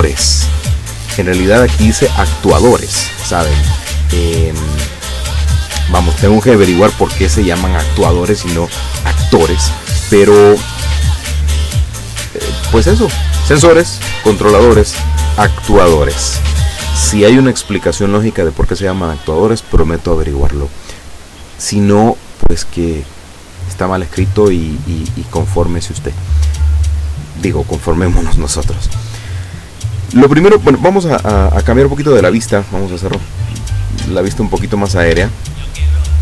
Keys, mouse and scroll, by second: 4.0-6.6 drag, 10.6-12.9 drag, 16.9 click, 22.4-24.0 drag, 28.9 click, 31.5-33.3 middle drag, 34.6-35.0 shift+scroll down 3, 35.3-36.2 shift+drag.